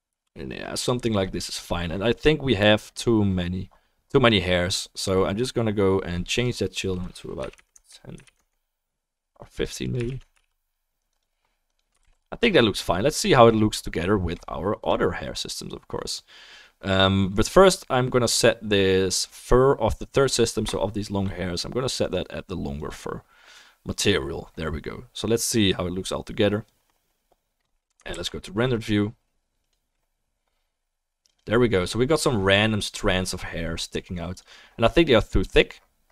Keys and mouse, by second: 9.9-11.2 drag, 12.0 ctrl+s, 14.8 click, 22.0-30.0 drag, 28.1 ctrl+s, 28.3-31.1 middle drag, 31.3 click.